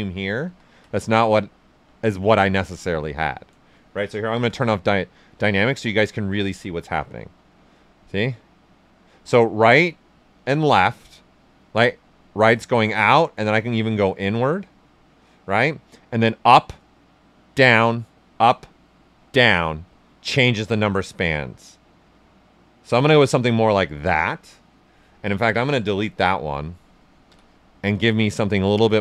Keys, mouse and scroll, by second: 0.4 ctrl+z, 1.6 shift+f, 4.3 shift+d, 4.6 right click, 7.0-16.9 drag, 23.3-25.7 right drag, 25.7 alt+click, 26.2 right click, 27.2 d, 27.6 ctrl+right click, 28.1 shift+f, 28.4 right click.